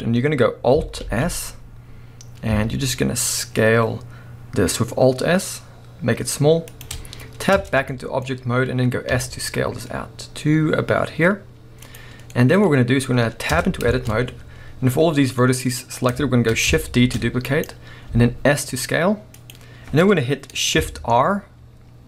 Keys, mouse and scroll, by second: 1.0 alt+s, 6.8 shift+click, 7.1-7.5 scroll down 1, 7.5 Tab, 7.9-11.8 middle drag, 9.1 s, 11.9 click, 12.2 scroll down 2, 12.3-13.5 middle drag, 13.5 Tab, 14.1-15.4 scroll up 1, 15.4 middle click, 17.0 shift+d, 17.6 right click, 18.1 s, 19.5 click, 20.0-20.9 scroll down 1.